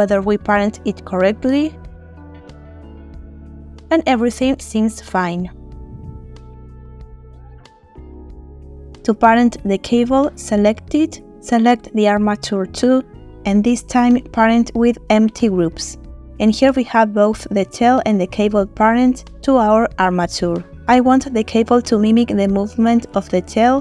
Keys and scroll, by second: 3.4 r, 4.7 Escape, 5.9 r, 6.9 Escape, 14.0 ctrl+p.